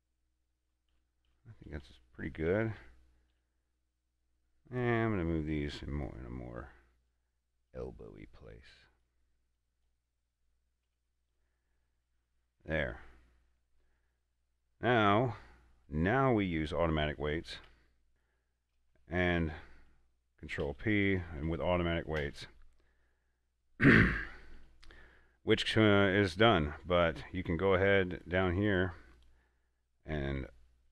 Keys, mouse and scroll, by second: 6.2 right click, 7.4-9.9 drag, 11.1 a, 11.6-16.2 middle drag, 16.2 scroll down 1, 16.9 middle click, 17.9 a, 18.1 shift+right click, 20.9 ctrl+p, 22.5 Return, 27.3 Tab, 27.7 right click, 28.1 a, 28.4 right click, 28.7 Tab, 29.0 right click.